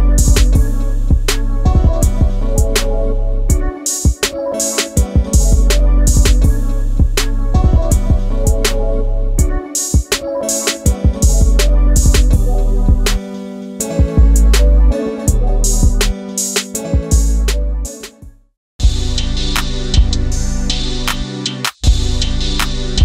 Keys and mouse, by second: 0.7-2.6 drag, 2.9-4.0 middle drag, 4.5-6.4 middle drag, 6.8 KP_1, 9.1-11.7 drag, 13.0 click, 14.3 click, 14.6 click, 15.4 click, 15.8-18.7 drag, 19.1 click, 19.6-20.9 drag, 21.7-22.2 drag.